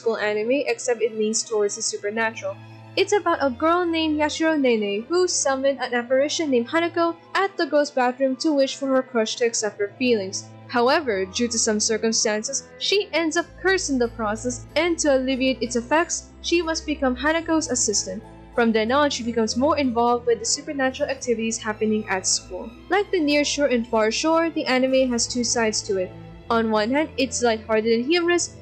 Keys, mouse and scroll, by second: 0.0 scroll, 2.0 ctrl+-, 7.2 ctrl+z, 7.9 ctrl+=, 10.2 ctrl+z, 11.2 ctrl+-, 13.4 ctrl+-, 13.5 ctrl+=, 16.2 ctrl+z, 17.4 ctrl+z, 17.7 ctrl+z, 17.9 ctrl+z, 18.4 ctrl+z, 18.7 ctrl+z, 19.5 ctrl+z, 20.0 ctrl+z, 20.2 ctrl+z, 20.8 ctrl+z, 21.5 ctrl+z, 22.4 ctrl+z, 22.7 ctrl+z, 23.2 ctrl+z, 23.7 ctrl+z, 28.4 ctrl+-.